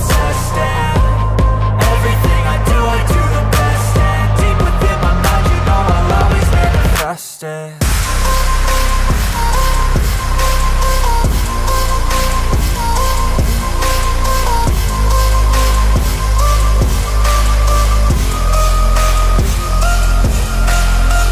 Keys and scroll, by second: 3.8 ctrl+alt+e, 8.1 Return.